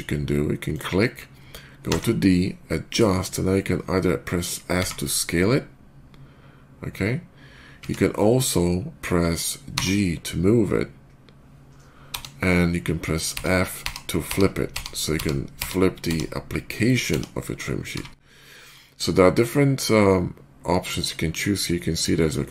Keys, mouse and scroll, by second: 0.6 ctrl+click, 1.7 d, 2.7 click, 4.6 s, 9.6 g, 13.2 f, 14.1 f, 15.0 f, 16.3 f, 20.4 f.